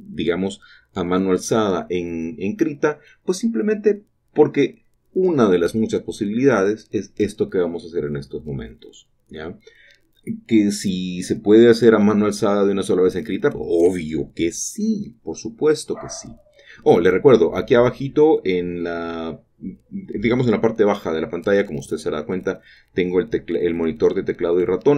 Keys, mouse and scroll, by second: 3.0 typing, 6.5 typing, 9.4 typing, 11.2 typing, 11.2-12.3 shift+drag, 12.3 typing, 14.5 typing, 17.3-20.3 shift+drag, 21.2 typing, 24.6 typing.